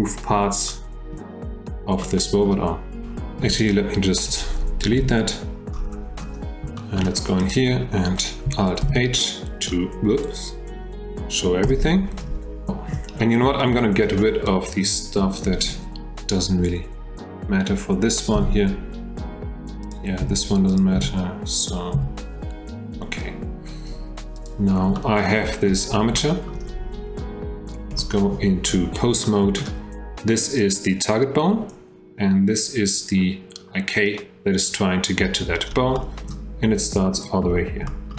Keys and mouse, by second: 0.7-1.1 drag, 2.0-2.5 drag, 3.4 F1, 5.0 Delete, 6.8 shift+drag, 8.8 alt+h, 10.3 click, 11.6 h, 12.7 shift+middle drag, 13.7 middle click, 14.6 click, 18.4 h, 19.8 click, 20.2 h, 20.8 click, 20.9 h, 21.6 click, 21.9 h, 25.0-25.4 shift+middle drag, 26.2-26.5 shift+drag, 27.9 F3, 29.2-29.6 shift+drag, 30.6 click, 33.1 click, 35.9-36.3 shift+drag, 37.9 shift+middle drag.